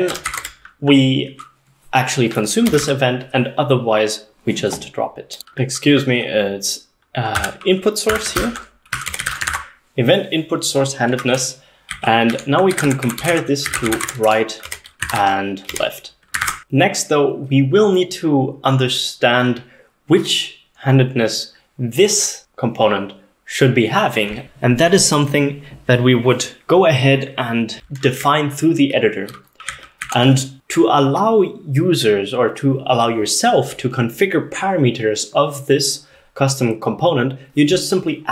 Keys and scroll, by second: 0.0-0.6 typing, 2.5-3.2 typing, 5.4-17.1 typing, 14.7 Escape, 15.7 Escape, 24.4 ctrl+s, 24.4 typing, 28.2-29.3 k, 29.7 k, 30.1 k.